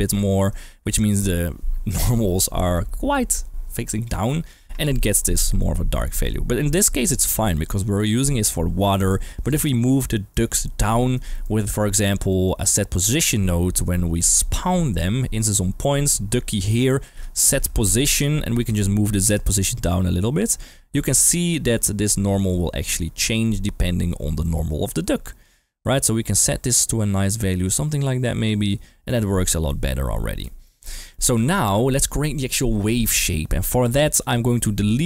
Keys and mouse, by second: 0.7 d, 1.2 d, 5.6-6.8 middle drag, 7.1 middle drag, 7.5 shift+middle click, 9.6 middle click, 10.1 middle click, 10.8 middle click, 11.4 middle click, 12.3 middle click, 12.9-14.3 middle drag, 14.6 middle click, 16.0-16.6 drag, 17.2 shift+a, 19.3-21.3 shift+drag, 21.7-22.0 middle drag, 22.3 click, 23.4-24.4 middle drag, 25.5-28.6 shift+drag, 29.0 middle click, 30.4 middle click, 30.9 middle click, 34.2-34.6 middle drag.